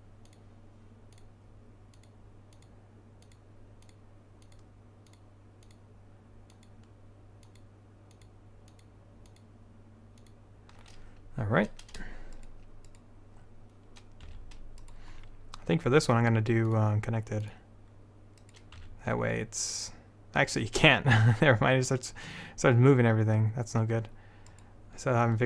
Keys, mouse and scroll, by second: 5.4-7.2 drag, 13.5 click, 14.0 right click, 14.4 s, 16.8-17.9 drag, 17.9 right click, 18.9 s.